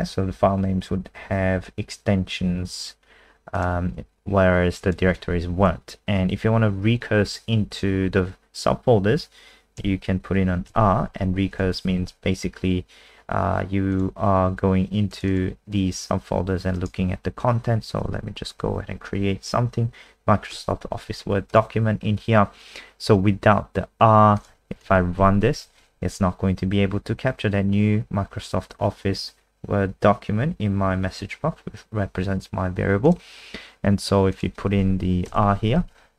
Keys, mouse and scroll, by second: 2.2-3.5 scroll down 1, 3.5 click, 10.7 r, 11.5 BackSpace, 13.9 click, 15.3 click, 16.7 right click, 18.1 w, 18.6 Down, 18.8 Down, 18.9 Down, 20.5 Return, 21.5 click, 24.8 ctrl+s, 25.2 F5, 33.0 click, 35.2 r, 35.8 ctrl+s.